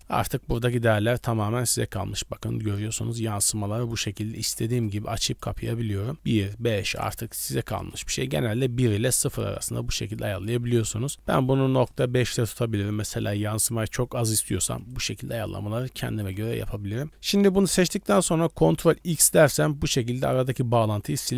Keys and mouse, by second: 0.9 shift+click, 4.0 shift+click, 5.4 click, 6.7-7.8 drag, 9.6 click, 10.4-11.9 drag, 15.0 shift+click, 19.1 ctrl+x.